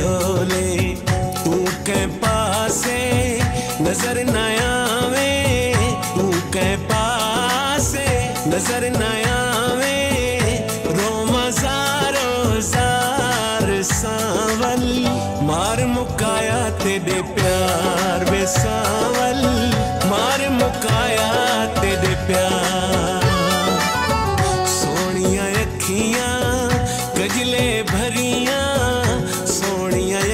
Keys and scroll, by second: 4.6 ctrl+s, 6.2 ctrl+s, 12.7 space, 13.4 3, 15.0 Right, 15.8 BackSpace, 17.1 9, 17.3 7, 18.0 2, 18.7 4, 22.9 BackSpace, 23.2 space, 23.9 ctrl+s, 24.4 Left.